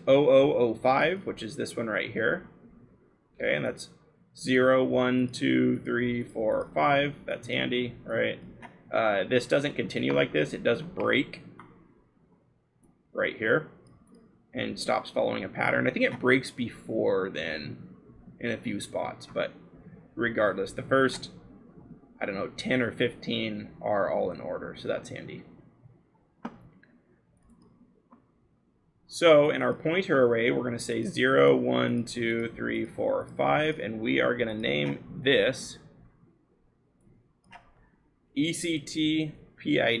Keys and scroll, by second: 8.8-9.4 scroll, 18.3-19.4 scroll, 35.2 l, 37.6-40.0 typing.